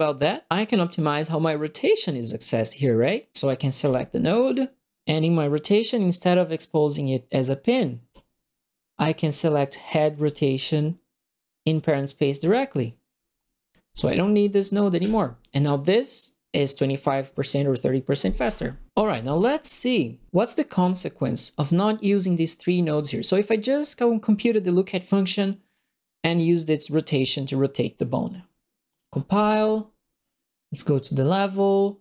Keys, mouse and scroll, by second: 3.8 click, 10.1 click, 13.9 click, 14.9 Delete, 19.7 click, 21.7 click, 22.8 click, 28.8 click, 31.2 click.